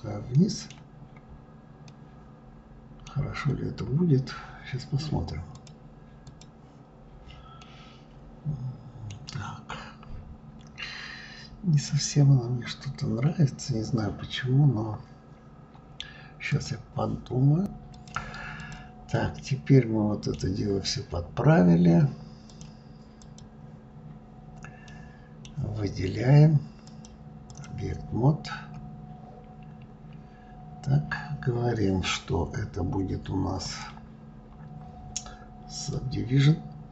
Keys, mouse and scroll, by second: 0.0-0.7 middle drag, 0.7-1.5 scroll up 2, 1.5-3.0 middle drag, 3.0-3.9 scroll down 1, 5.2 click, 5.9 click, 6.7 scroll down 2, 7.3-10.3 middle drag, 10.3-10.6 scroll down 2, 18.3 click, 18.9-20.2 middle drag, 20.2-21.2 scroll down 2, 22.2 click, 22.9 click, 23.7-24.0 scroll down 3, 24.6-26.6 middle drag, 26.6-28.8 drag, 28.8-29.5 scroll up 3, 30.0 scroll up 6, 30.6-32.8 scroll down 1, 32.8-33.4 scroll down 1, 33.4-36.4 drag.